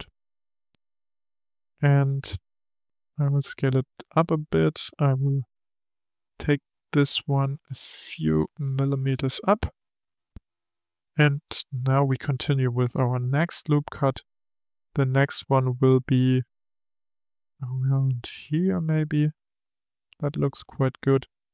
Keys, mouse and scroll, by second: 2.9 s, 5.4-7.8 drag, 11.8-15.0 drag, 16.6-19.7 drag.